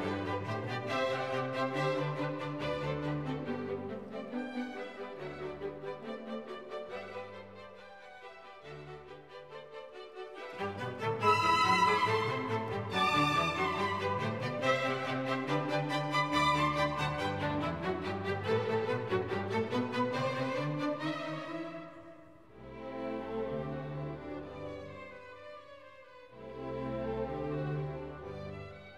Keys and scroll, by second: 9.3 r, 13.1 e.